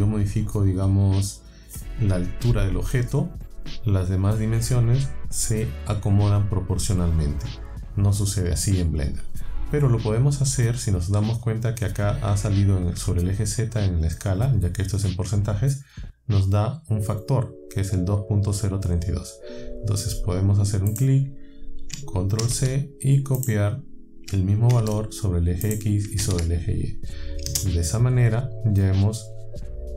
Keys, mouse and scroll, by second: 20.9 click, 22.4 ctrl+c, 23.4 click, 24.7 ctrl+v, 25.7 middle click, 26.2 ctrl+v, 27.5 KP_Enter, 29.3 scroll up 2, 29.6 scroll down 2.